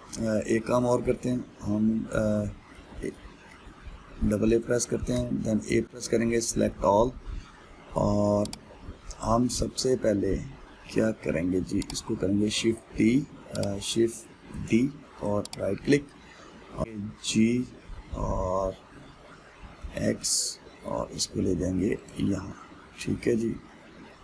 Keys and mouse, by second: 4.3 a, 6.5-13.5 middle drag, 13.5 shift+d, 15.3 shift+d, 17.9 g.